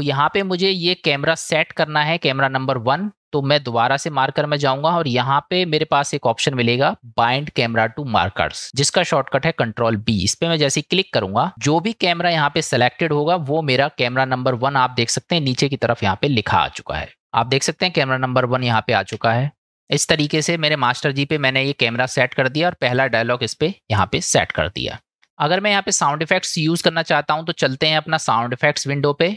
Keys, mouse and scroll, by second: 3.6-11.5 drag, 19.6 space, 20.3 space, 24.6 click.